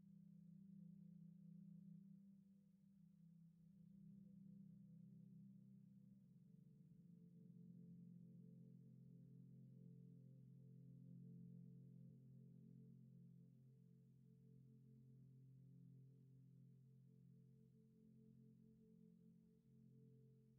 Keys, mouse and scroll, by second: 2.0 typing, 2.8 Escape, 3.3-3.7 typing, 5.2 Return, 6.2 typing, 7.1 Return, 7.3 typing, 11.2 Return, 12.1 typing, 12.8 Return, 14.0 typing, 15.5 Return, 16.4 typing, 18.3 Escape.